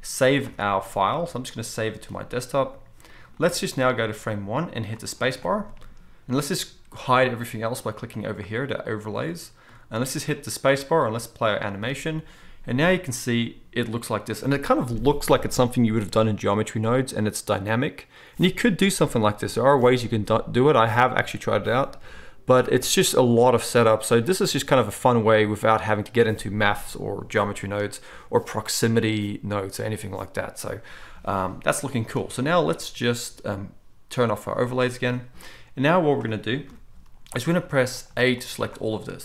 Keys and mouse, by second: 0.5 ctrl+s, 8.3-34.3 middle drag, 10.7 space, 32.2 space, 34.3 click, 34.4-38.4 middle drag, 36.7 KP_7, 37.6 z, 38.4-39.2 drag.